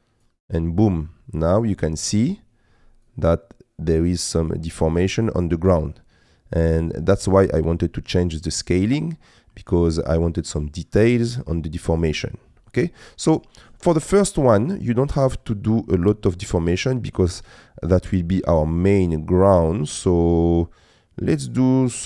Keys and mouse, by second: 1.0 middle click, 3.2-5.5 drag, 5.9-7.3 middle drag, 8.0-9.0 middle drag, 10.2-13.0 middle drag, 14.2-16.0 drag, 16.8-18.1 middle drag, 19.1-22.0 drag.